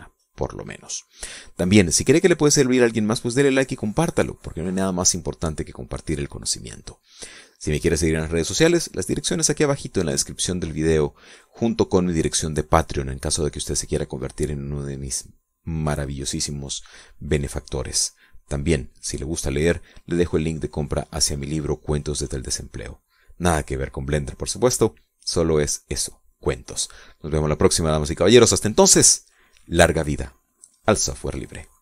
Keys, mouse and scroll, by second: 6.8 right click, 7.3 right click, 9.4 right click, 11.0 right click, 15.8 right click, 16.2 right click, 16.8 scroll down 2.